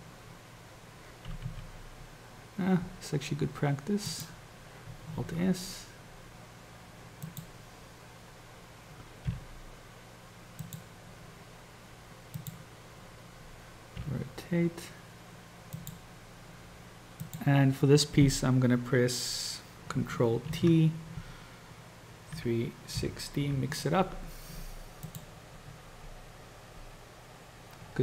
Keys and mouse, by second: 1.6 r, 5.2 alt+s, 9.3 g, 12.3 click, 14.0 r, 17.2 click, 20.5 ctrl+t.